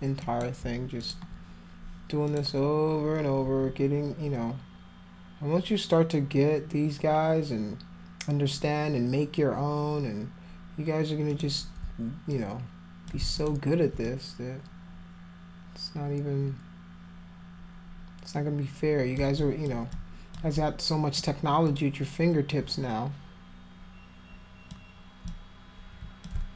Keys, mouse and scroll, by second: 0.2 alt+click, 1.0 click, 2.1 click, 11.3 click, 12.3 alt+click, 13.4 alt+click, 14.1-19.2 drag, 19.4 alt+click, 19.9 alt+click, 20.6 alt+click, 21.7-24.7 alt+drag, 25.3 click.